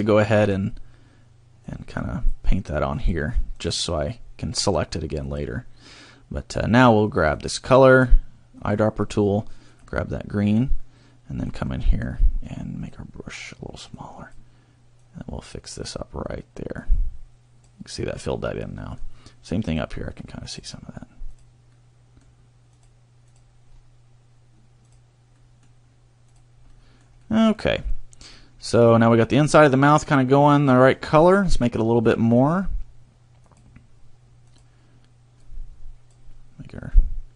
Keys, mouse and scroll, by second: 1.7 click, 3.0 click, 3.7 click, 4.6 click, 5.3 click, 7.3 click, 10.2 middle click, 10.9 middle click, 11.7 middle click, 12.9 click, 13.9 click, 15.0 click, 18.5 middle click, 19.7 click, 20.5 click, 21.3 click, 21.8 middle click, 22.7 click, 23.3 click, 23.7 scroll down 1, 24.9 click, 25.3 middle click, 26.3 click, 26.7 middle click, 27.3 middle click, 27.9 middle click, 28.5 scroll up 2, 29.4 middle click, 32.3 click, 35.4 click.